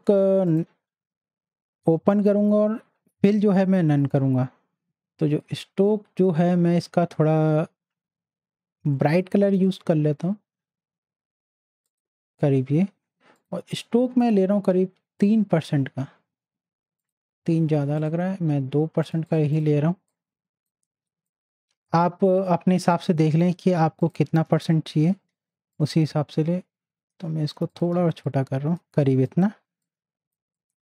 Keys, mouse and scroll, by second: 0.4 click, 6.2 click, 9.6 click, 11.8 click, 19.7 z, 20.1-22.8 drag, 25.7-27.7 alt+shift+drag, 28.0 z, 28.2 click, 28.9 space, 29.0 click, 30.4 space, 30.5 click.